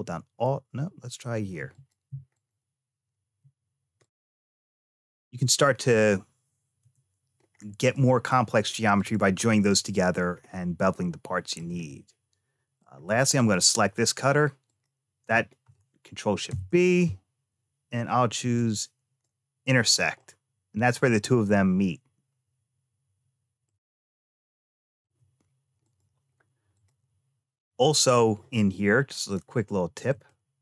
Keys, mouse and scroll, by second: 1.5 alt+click, 2.1 alt+click, 3.8 click, 4.8 middle click, 6.6 Tab, 7.3-7.7 scroll down 2, 7.7 middle click, 8.8 click, 10.1 scroll down 2, 10.8 shift+middle click, 11.7-12.7 middle drag, 13.2 click, 14.5 shift+click, 16.3 ctrl+shift+b, 20.0-23.5 middle drag, 24.1 shift+middle click, 25.7 click, 26.6 click, 29.0 click, 29.9-30.6 drag.